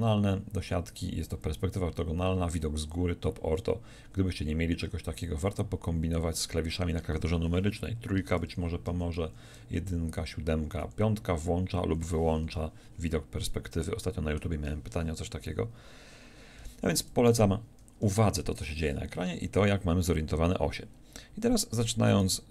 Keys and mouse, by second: 8.1-10.8 typing, 16.6 KP_5, 17.9 KP_7.